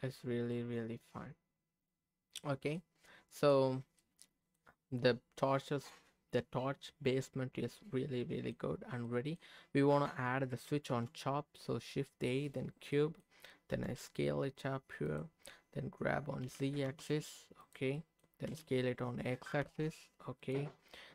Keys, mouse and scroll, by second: 0.2-0.5 scroll down 2, 0.5-2.5 middle drag, 2.7 scroll up 1, 2.7 middle click, 3.7 scroll down 1, 4.0 middle click, 4.9-6.9 middle drag, 7.1-8.5 middle drag, 9.0 middle click, 10.9 shift+a, 11.0 shift+a, 12.9 middle click, 13.7 s, 15.1 click, 16.4 g, 16.8 z, 17.6 click, 17.9 middle click, 18.5 s, 19.6 x, 20.4 click.